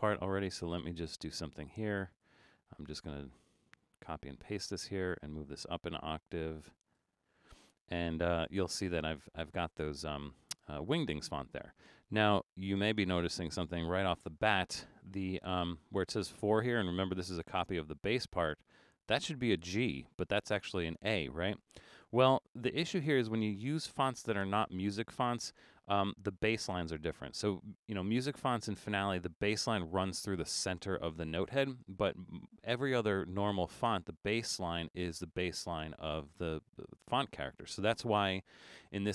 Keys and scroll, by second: 7.0 9, 14.2 super+=.